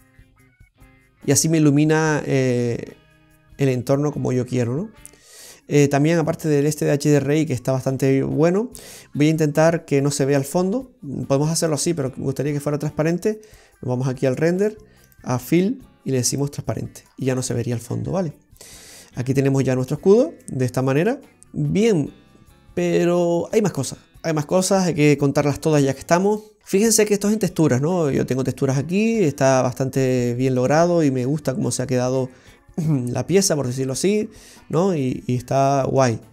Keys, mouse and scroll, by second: 0.3-1.0 scroll down 2, 0.7 middle click, 2.0-2.6 scroll up 1, 2.6 click, 2.6-3.0 scroll up 1, 6.4 middle click, 6.4-7.4 scroll up 3, 12.0-12.4 scroll down 3, 13.5 click, 15.1 click, 17.4 middle click, 17.4 scroll up 2, 20.2 scroll up 2, 20.5 middle click, 21.4 middle click, 21.4 scroll down 2, 26.3 click, 26.6 scroll down 1, 26.9 middle click, 29.0 click, 31.5 middle click, 31.5 scroll up 2, 34.4-34.9 scroll down 5, 34.8 middle click.